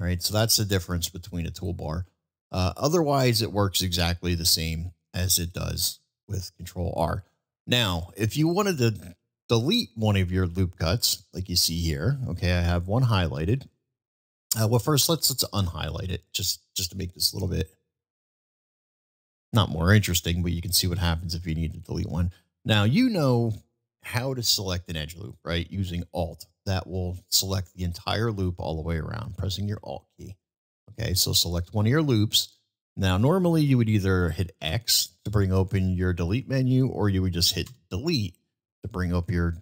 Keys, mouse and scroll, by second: 0.4 click, 0.9 click, 1.4 click, 2.8-3.1 middle drag, 4.2 ctrl+z, 6.0 ctrl+z, 6.9 ctrl+z, 7.6 middle click, 9.2 middle drag, 10.6-12.6 middle drag, 16.4 click, 18.0 click, 18.5 click, 20.4 middle click, 21.1-22.2 middle drag, 24.2-24.7 middle drag, 25.1 middle drag, 26.7-27.0 middle drag, 30.4 alt+click, 31.2-31.8 middle drag, 32.2-32.7 middle drag, 37.7 Delete, 37.7 Delete.